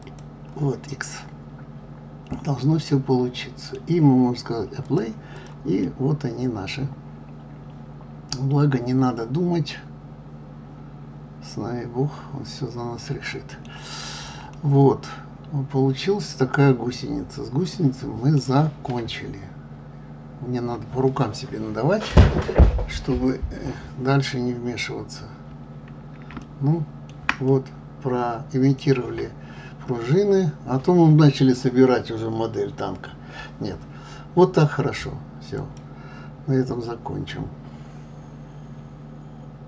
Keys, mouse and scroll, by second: 0.0 click, 0.9-3.9 middle drag, 4.8 click, 5.3 click, 5.9-8.9 middle drag, 14.0-14.5 scroll up 3, 14.5-16.7 middle drag, 16.7-17.4 scroll down 3, 17.7-19.5 middle drag, 19.5-20.0 scroll up 1, 20.0 scroll up 1, 24.5-24.9 scroll up 2, 25.2 scroll down 1, 26.4-30.5 shift+middle drag.